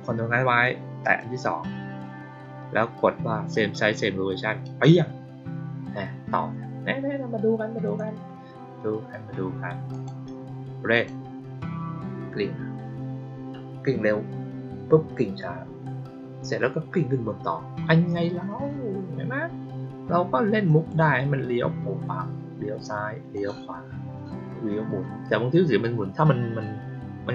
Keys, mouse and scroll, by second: 0.9 ctrl+click, 4.5 click, 7.7 click, 9.8 click, 10.8 click, 20.6 click, 23.2 click.